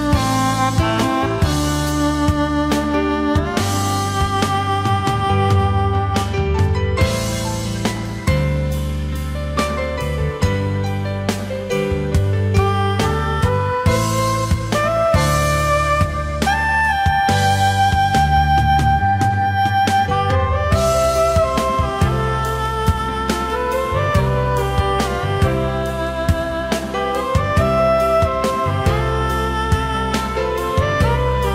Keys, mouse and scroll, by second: 3.6 space, 5.3 alt+scroll up 1, 11.0 space, 14.7 ctrl+z, 16.3 ctrl+z, 17.5 ctrl+z, 23.1 alt+scroll down 1, 23.6 ctrl+shift+a, 26.2 alt+scroll up 1, 26.4 space, 31.3 shift+click.